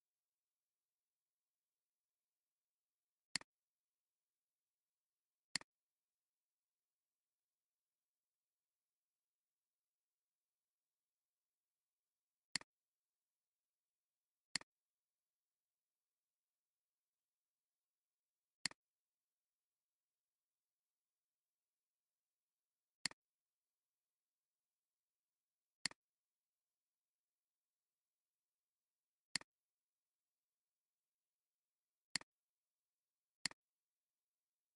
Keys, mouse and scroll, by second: 8.5-9.7 typing, 23.0 click, 23.3-24.7 drag, 25.9 click.